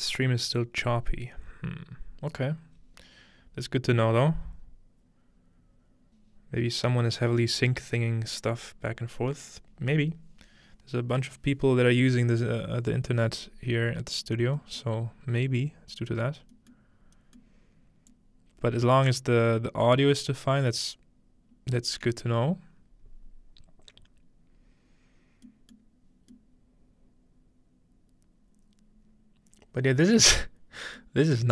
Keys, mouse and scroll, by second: 15.2-16.0 scroll down 2, 16.0-16.5 scroll up 2, 16.5-19.2 middle drag, 17.3-17.9 scroll up 1, 19.2 click, 21.2-23.2 scroll down 1, 25.5-26.3 middle drag, 31.4-31.5 scroll down 1.